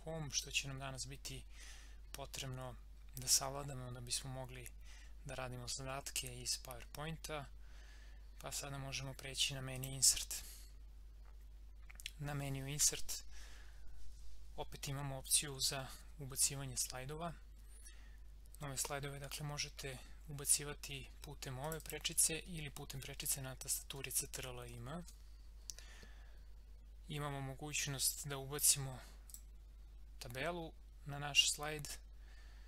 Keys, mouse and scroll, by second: 9.7 click, 21.6 click, 24.0 ctrl+m, 29.3 click.